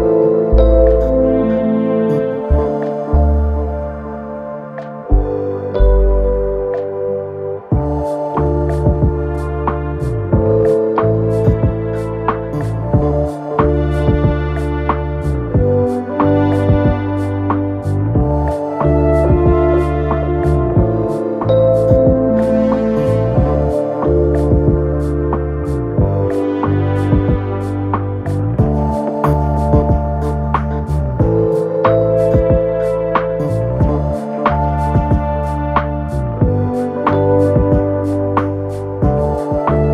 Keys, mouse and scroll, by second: 19.3 shift+click, 20.5-39.9 drag.